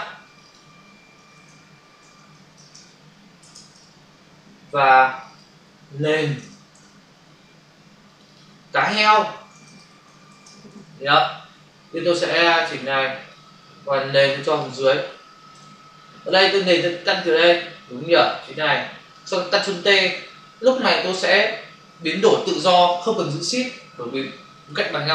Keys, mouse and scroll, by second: 0.2 click, 0.4 click, 0.8-1.9 typing, 3.3 typing, 3.6 Return, 5.0 click, 6.2 typing, 6.6 Return, 8.0 click, 8.2 click, 8.3 click, 8.8-9.9 typing, 10.7 Return, 12.3 click, 14.1 click, 14.3 click, 14.4 click, 14.5 double click, 17.1 click, 21.0 ctrl+t, 23.5 click.